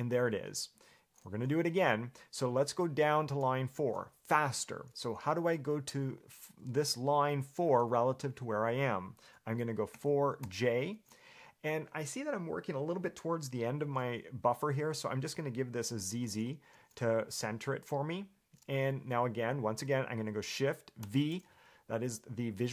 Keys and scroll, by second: 10.1 4, 10.6 j, 21.2 shift+v.